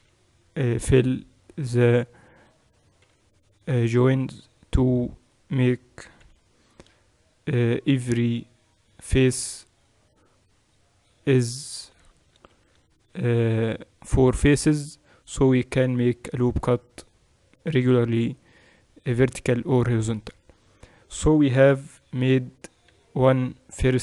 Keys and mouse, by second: 0.0 j, 3.0-9.4 right drag, 3.0 j, 6.2 j, 9.6-12.4 drag, 12.4 ctrl+r, 12.4-15.7 right drag, 20.4-24.0 middle drag, 21.8 KP_1.